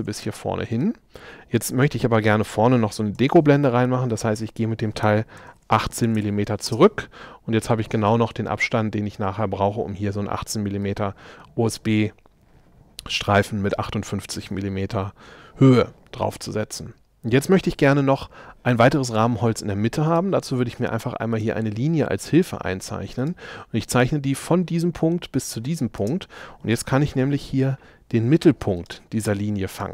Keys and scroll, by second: 0.3 shift+space, 3.2 m, 6.2 Return, 6.8 space, 26.0 space, 27.2 l.